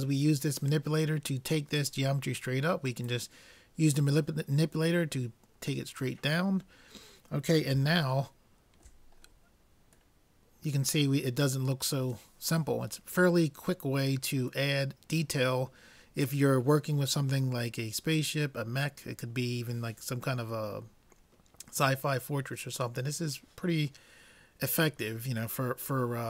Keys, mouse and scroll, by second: 3.1-4.9 drag, 6.5-12.1 middle drag.